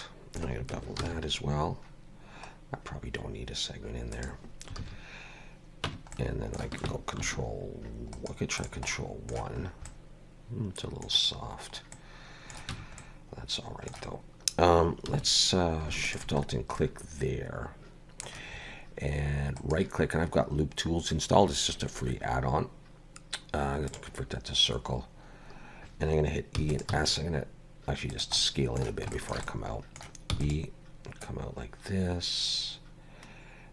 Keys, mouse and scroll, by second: 1.0 ctrl+b, 4.8 alt+a, 5.9 Tab, 6.2 middle click, 7.3 ctrl+1, 8.2 right click, 8.9 middle click, 9.7-10.1 scroll up 2, 9.9 middle click, 12.0 middle click, 12.7 Tab, 13.0 middle click, 15.1 2, 16.1 alt+shift+click, 16.5 scroll down 2, 16.8 middle click, 19.6 right click, 26.6 e, 26.9 s, 28.4 middle click, 29.2 shift+middle click, 29.5 middle click, 30.4 e, 31.3 click.